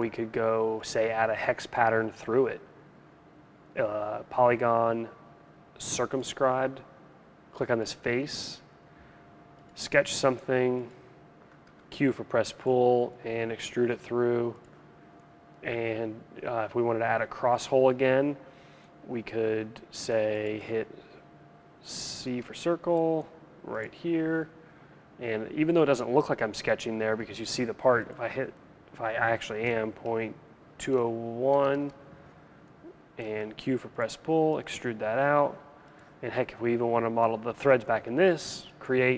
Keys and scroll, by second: 11.2 q, 22.0 c, 29.6 Delete, 30.5-31.5 typing, 31.6 Return, 33.5 q.